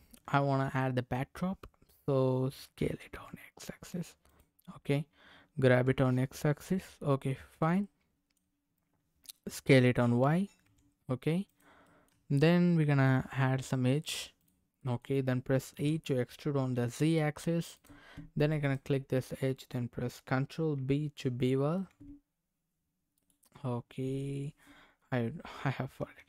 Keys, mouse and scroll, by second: 0.2 Tab, 2.9 s, 3.1 x, 4.3 click, 4.5 scroll down 1, 5.7 g, 6.6 x, 7.5 click, 7.8 middle click, 8.6-9.7 scroll down 2, 10.0 s, 10.8 y, 11.4 click, 11.8-13.6 middle drag, 12.1 Tab, 14.4 click, 14.8 middle click, 15.7 e, 16.7 z, 17.7 click, 18.6 click, 21.7 ctrl+b, 23.1 right click, 25.9 Tab.